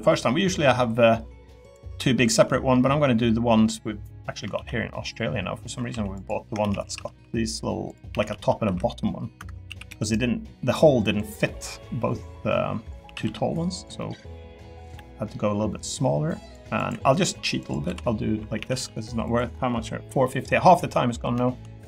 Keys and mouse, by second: 0.2 middle click, 0.7 middle click, 1.1 middle click, 1.6 click, 4.5 ctrl+r, 6.6 shift+d, 6.8 s, 7.0 z, 8.1-9.9 typing, 9.4 Escape, 11.4 middle click, 13.0 s, 13.2 z, 14.0 click, 14.9 e, 17.8 l, 18.6 a, 18.7 g, 19.2 click, 20.2 middle click, 21.3 shift+middle click.